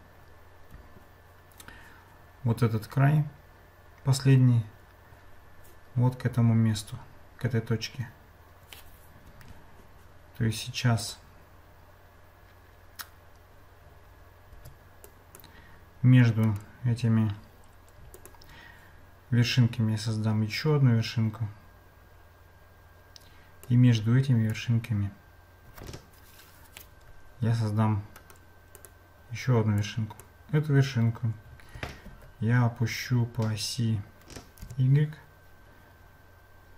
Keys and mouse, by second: 11.0 click, 14.5 Tab, 15.0 click, 16.6-18.3 right drag, 23.9 click, 28.3 right click, 29.8 click, 31.8 g.